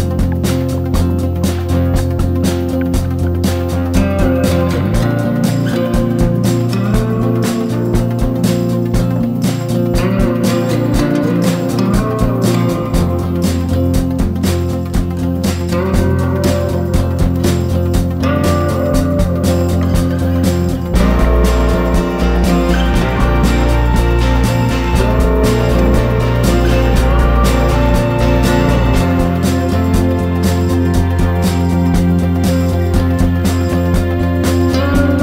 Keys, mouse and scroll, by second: 2.1 ctrl+d, 2.3 click, 6.0 Delete, 6.4 click, 7.0 ctrl+d, 7.1-12.5 drag, 12.9 shift+click, 13.8 ctrl+g, 14.6 ctrl+d, 14.7 click, 15.9 shift+click, 18.1 ctrl+shift+g, 19.0 click, 20.4 ctrl+shift+g, 21.6 click, 22.3 shift+click, 22.7 shift+click, 22.9 shift+click, 25.2 ctrl+g, 26.3-28.3 drag, 28.9 Up, 29.0-29.5 typing, 29.1 Up, 29.3 Up, 29.4 Up, 31.4 click, 32.4 ctrl+shift+g, 34.6-35.2 drag.